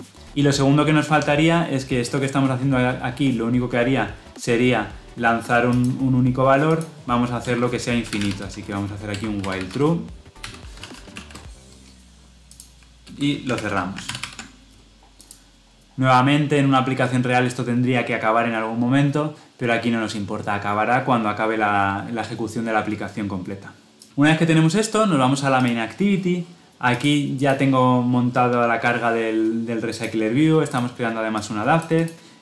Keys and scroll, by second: 9.0 Return, 13.9 ctrl+alt+l, 14.1 ctrl+alt+o.